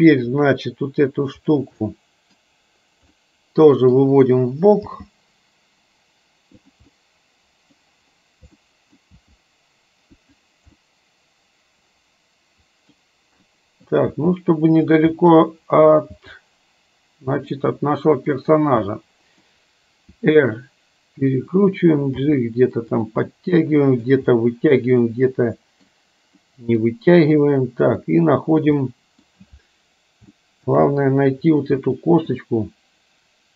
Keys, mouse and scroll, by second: 0.4 click, 1.9-2.5 middle drag, 3.3-4.0 middle drag, 5.0 g, 7.0-7.9 middle drag, 8.7 middle click, 9.2 g, 11.0-13.0 middle drag, 13.5 middle click, 14.3 g, 15.2 middle click, 15.2 scroll up 1, 16.3 g, 17.8-18.4 middle drag, 18.9-19.5 middle drag, 18.9 scroll up 1, 20.3 r, 22.3 g, 23.4 middle click, 25.2-26.0 middle drag, 26.5-26.9 middle drag, 28.8-29.4 middle drag, 30.4 shift+middle click, 31.9 middle click.